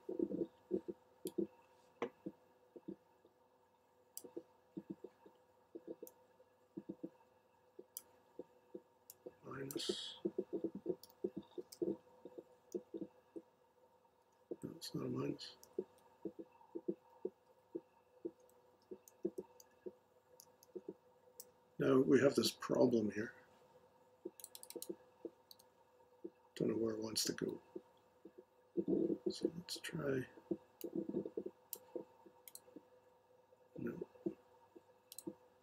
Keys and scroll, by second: 11.0 -, 11.6 super+v, 14.3-16.0 Left, 17.4 Tab, 18.6 shift+Tab, 19.2 Right, 19.7 Left, 20.2 Left, 25.5 Delete, 27.4 Tab.